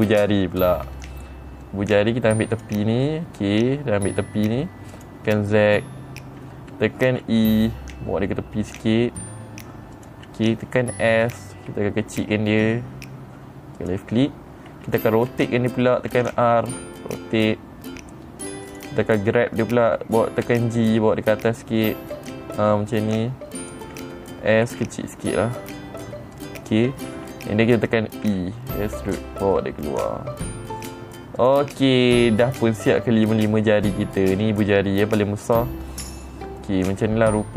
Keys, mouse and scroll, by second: 1.5 middle click, 3.0 click, 3.5 middle click, 5.4 click, 7.6 e, 10.4 click, 14.3 click, 16.6 r, 19.1 click, 21.0 g, 24.1 click, 26.8 click, 28.7 e, 31.9 click, 36.3 middle click, 37.4-37.5 middle drag.